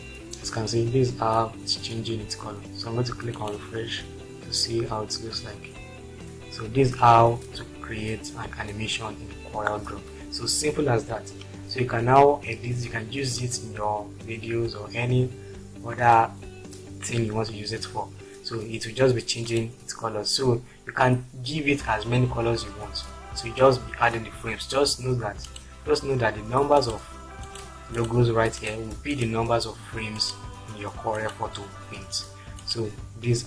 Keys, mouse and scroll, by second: 28.0 click, 28.6 click, 29.2 click, 30.2 click.